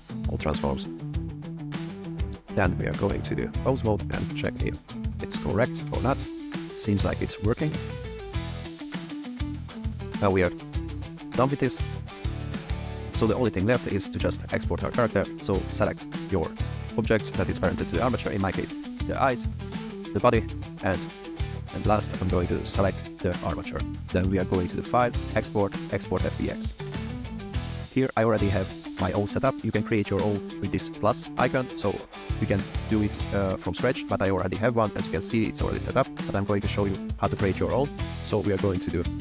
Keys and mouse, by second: 1.7 click, 2.6-3.1 drag, 3.7 click, 4.2 r, 5.6 r, 6.6 r, 7.9 r, 8.6 r, 8.6 z, 9.5 r, 9.9 click, 15.1 shift+click, 15.3 middle drag, 16.1 click, 16.7 shift+click, 19.7 shift+click, 21.2 shift+click, 24.5-26.6 drag.